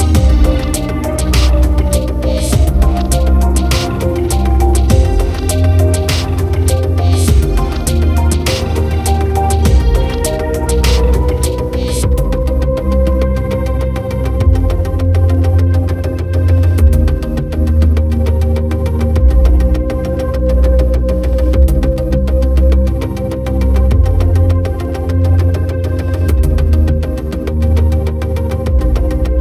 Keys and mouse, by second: 0.7 right click, 1.3 right click, 1.6 right click, 2.2 right click, 5.9 right click, 7.7 right click, 8.4 right click, 8.9 right click, 9.5 right click, 9.8 right click, 11.0 right click, 11.2 right click, 11.8 right click, 12.1 right click, 12.5 right click, 12.9 right click, 13.1 right click, 13.9 right click, 14.2 right click, 14.8 right click, 15.7 right click, 16.0 right click, 16.4 right click, 16.8 right click, 17.4 right click, 17.6 right click, 24.2 right click, 24.4 right click, 24.7 right click, 25.7 right click, 26.9 right click, 28.9 right click.